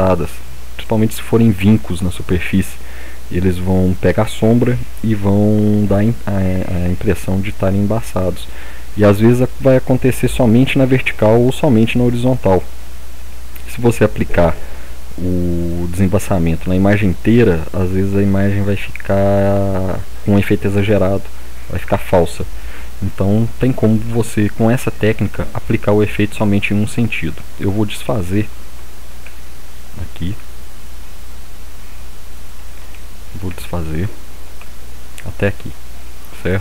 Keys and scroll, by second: 29.2 ctrl+z, 30.3 ctrl+z, 32.9 ctrl+z, 33.4 ctrl+z, 34.6 ctrl+z.